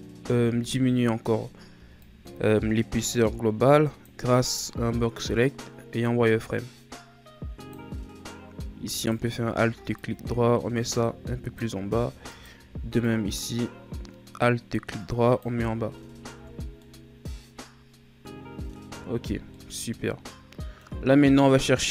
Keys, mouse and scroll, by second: 0.2 z, 1.7 b, 5.4-8.5 drag, 8.9 alt+right click, 9.9-12.3 drag, 12.3 alt+right click, 13.0-15.6 drag, 15.6 z, 16.3 Tab, 16.6 scroll down 2, 16.8-18.9 middle drag, 18.9 a, 19.2-19.5 scroll down 1, 19.5-21.9 middle drag.